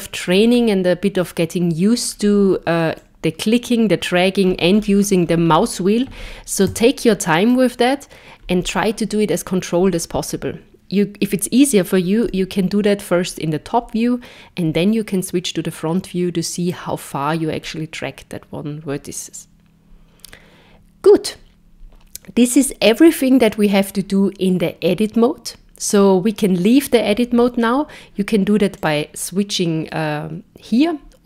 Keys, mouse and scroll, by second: 0.4-1.2 scroll down 2, 1.2 middle click, 3.0 click, 12.3 KP_7, 14.6 KP_1, 28.8 click.